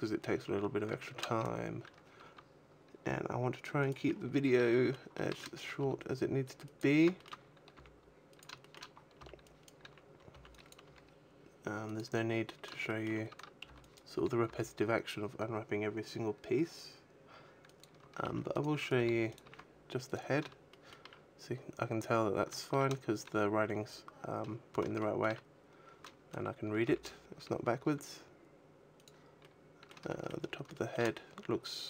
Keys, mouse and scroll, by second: 0.3 scroll down 5, 0.8 shift+middle click, 1.1 a, 2.1 g, 3.7 click, 3.9-4.4 scroll up 9, 4.5 shift+middle click, 4.9 shift+middle click, 5.7 g, 6.6 click, 6.9 shift+middle click, 7.6 g, 8.3 click, 8.5 shift+middle click, 8.7-9.0 scroll down 3, 9.0 b, 9.7 a, 10.2 b, 10.6 g, 12.2 click, 12.3 scroll up 2, 12.7 shift+middle click, 13.2 a, 13.5 b, 14.3 g, 17.7 click, 17.9 a, 18.1 b, 18.5 right click, 18.7 g, 19.0 click, 19.2 a, 19.9 right click, 20.5 shift+middle click, 24.7 shift+middle click, 25.3-26.2 scroll down 5, 26.2 a, 26.7 g, 28.9 click, 29.3 middle click, 30.0 shift+middle click, 30.2-30.5 scroll down 1, 30.5 shift+middle click, 30.5 scroll up 5, 31.6 scroll up 1.